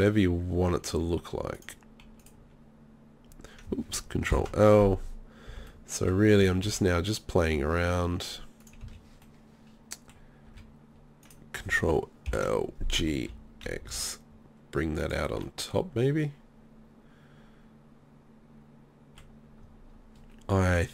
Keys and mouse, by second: 1.7 click, 4.3 ctrl+l, 5.5 b, 6.4 s, 8.8 z, 10.5 a, 11.2-12.3 right drag, 12.3 ctrl+l, 12.8 g, 15.1 click, 15.4 click, 15.6 middle click, 15.6 click, 15.8 middle click, 15.8 click, 16.3 middle click, 20.5 middle click.